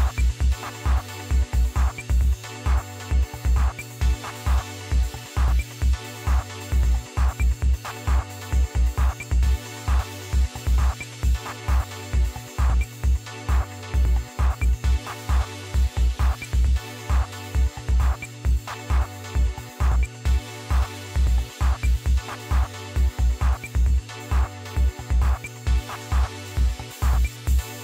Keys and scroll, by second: 2.4 Left, 2.5 Left, 3.0 Delete, 4.0 6, 5.9 Left, 6.4 Delete, 7.3 7, 8.8 Left, 9.2 Delete, 10.2 8, 15.2 Delete, 15.4 1, 19.6 Left, 19.8 Left, 21.1-21.7 typing, 23.5-25.4 typing.